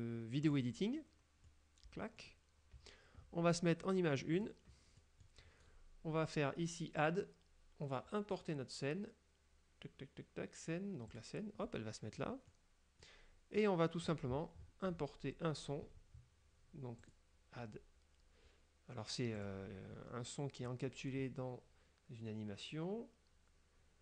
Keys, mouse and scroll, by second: 0.6 click, 1.6 middle click, 4.5 click, 5.1 middle click, 7.1 click, 11.2 click, 12.6 middle click, 13.1 scroll down 1, 13.7 middle click, 13.7-14.1 scroll down 1, 14.2-15.0 scroll up 1, 17.1 click, 19.5 click.